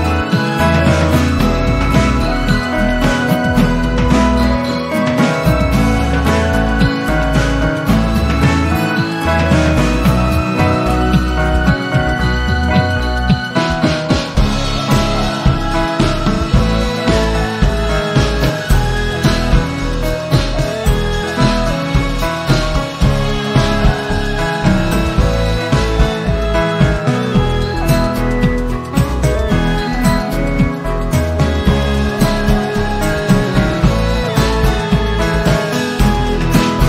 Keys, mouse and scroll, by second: 9.1 v, 9.6-14.3 shift+drag, 28.3 Delete, 29.6-31.5 drag.